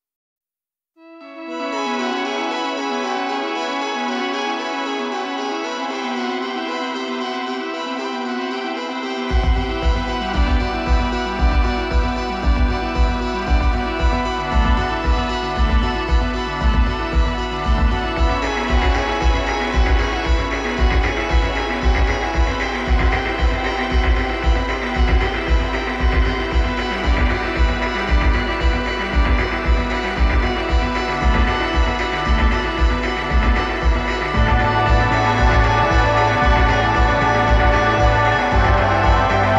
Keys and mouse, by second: 5.1-10.5 drag, 11.7-14.3 middle drag, 15.1-21.5 middle drag, 24.1 right click, 30.5-31.6 right drag, 31.6-34.1 middle drag, 34.2-36.3 right drag, 37.1-39.5 drag.